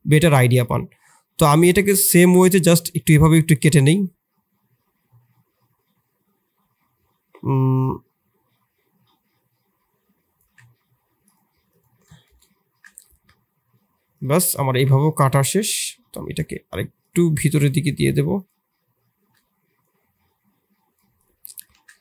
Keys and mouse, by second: 1.8-14.2 drag, 14.6-17.1 drag, 19.9-21.7 drag, 21.7 shift+z, 21.9 middle drag.